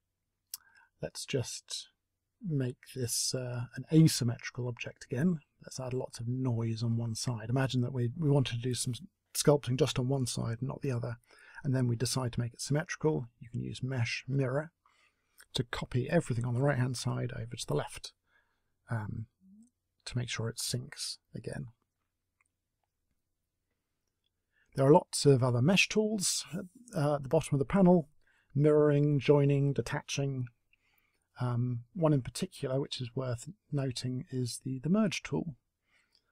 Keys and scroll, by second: 17.8 s, 22.2 Delete.